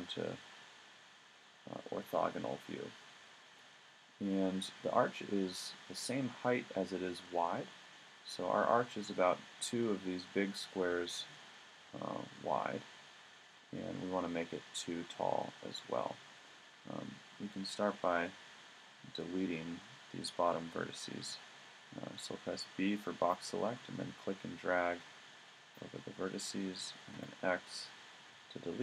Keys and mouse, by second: 22.1 b, 27.1 x.